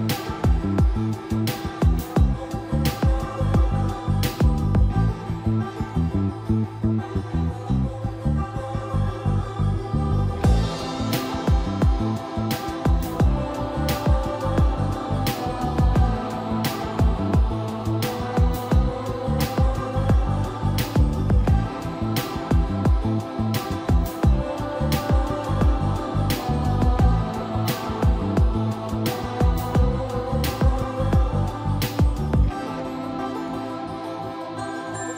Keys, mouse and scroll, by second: 0.0-1.6 typing, 1.1 middle click, 2.3 click, 3.0 scroll up 1, 3.8 click, 5.1-6.9 typing, 7.0 click, 7.6 scroll down 1, 8.5 click, 9.6 scroll up 1, 10.9 scroll down 1, 11.1 typing, 12.1 click, 12.7-13.2 scroll down 1, 13.6 click, 13.9-15.2 typing, 15.9-16.3 scroll down 1, 17.1 shift+middle click, 18.3 scroll up 1, 18.7-20.4 typing, 19.2 click, 20.6 Return, 21.3-25.7 drag, 30.0-32.9 typing, 33.3 click, 34.6 typing, 35.0 click.